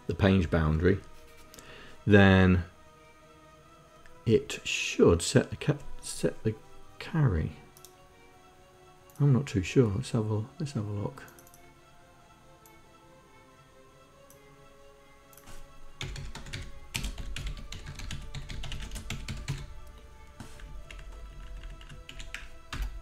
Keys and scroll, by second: 16.0-19.9 typing, 20.7 Left, 21.0 Left, 21.2 Left, 21.3 Left, 21.5 Left, 22.1 Delete, 22.7 Return.